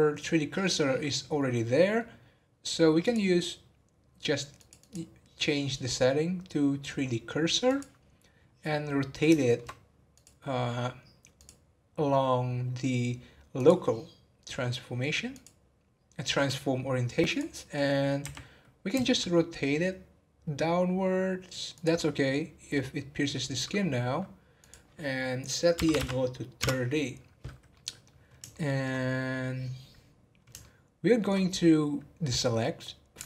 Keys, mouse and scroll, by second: 3.0-4.7 drag, 4.7-7.8 drag, 8.5-9.4 scroll down 1, 9.4 shift+middle click, 10.1 click, 11.3-14.4 drag, 14.5 middle click, 15.3 click, 24.6-27.6 drag, 27.7-29.0 middle drag, 29.0 scroll up 2, 30.6 shift+middle click, 31.4-32.1 scroll up 2, 32.7 scroll down 1.